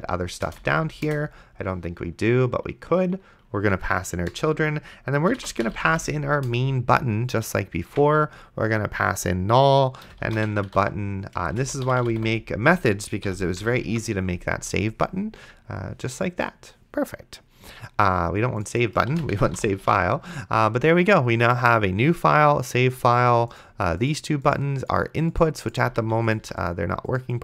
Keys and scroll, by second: 0.6 c, 1.1 Return, 5.4-6.6 typing, 7.9 Tab, 9.8-13.6 typing, 13.3 End, 14.1 ctrl+s, 19.1-20.2 typing, 20.1 ctrl+s, 26.1 d.